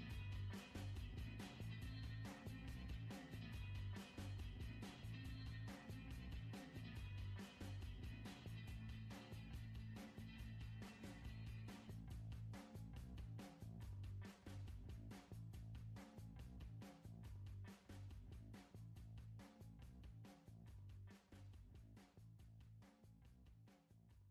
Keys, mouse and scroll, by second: 6.6 scroll down 3, 6.9-8.7 middle drag, 8.7 click, 10.1 ctrl+j, 11.5 click, 13.2 scroll up 3, 13.3 middle click, 13.8 scroll up 2, 15.0-20.7 drag, 21.9 click, 22.6 scroll down 1, 22.8 middle click, 23.4-23.8 scroll down 5, 23.8 middle click.